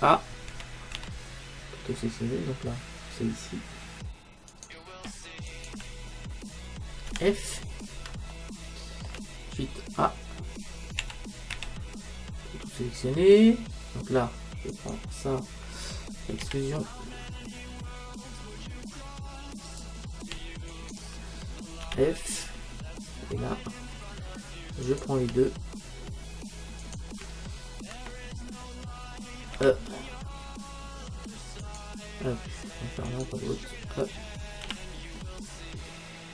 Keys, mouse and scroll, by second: 0.5 a, 1.0 a, 2.0-4.5 middle drag, 4.5-7.5 right drag, 7.1 f, 7.6-10.1 middle drag, 11.0 a, 11.6 a, 14.7-16.7 right drag, 16.5 e, 20.7-22.6 right drag, 21.9 f, 24.9-26.6 right drag, 26.8-28.7 right drag, 29.6 e, 33.1-34.8 right drag, 34.7 e.